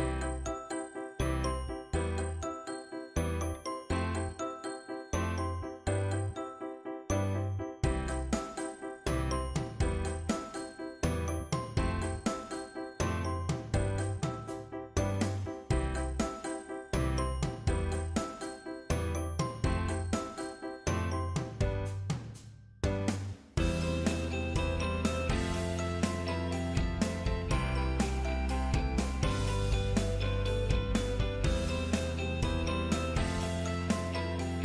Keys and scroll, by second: 21.3 ctrl+Up.